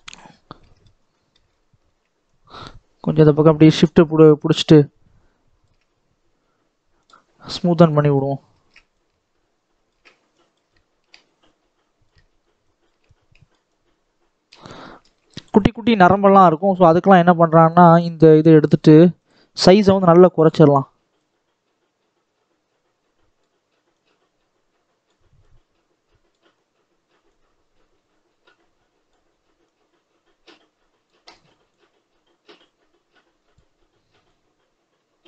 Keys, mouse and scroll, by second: 0.2 scroll up 1, 0.5 middle click, 0.8 scroll down 2, 1.1 shift+middle click, 1.4-1.7 scroll up 1, 1.7-2.3 scroll down 1, 2.3-5.2 shift+drag, 6.9-8.4 drag, 8.4 shift+middle click, 8.9-14.7 shift+drag, 14.7 middle click, 15.4-16.7 scroll up 1, 16.7-17.7 shift+middle drag, 17.7-35.2 drag.